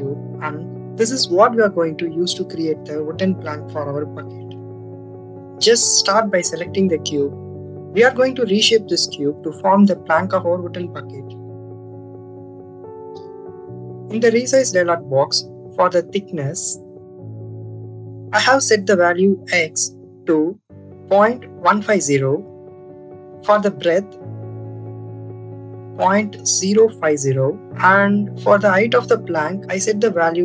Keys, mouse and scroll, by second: 1.2 Delete, 1.2 click, 11.7 click, 14.0 click, 15.7-22.5 drag, 22.7-28.7 drag, 29.1-30.4 drag.